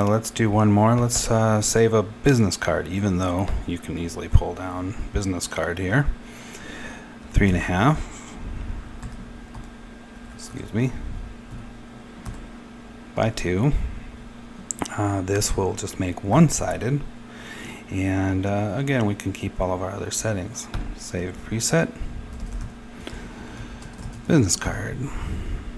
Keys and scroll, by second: 6.8-7.9 typing, 10.1-11.4 typing, 12.8-14.0 typing, 15.9-16.7 typing, 22.0-25.3 typing.